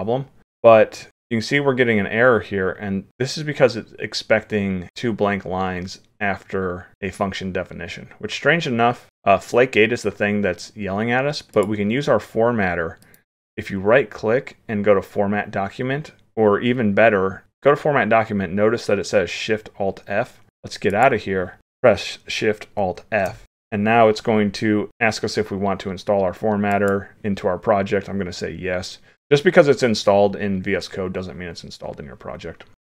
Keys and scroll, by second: 22.9 alt+shift+f.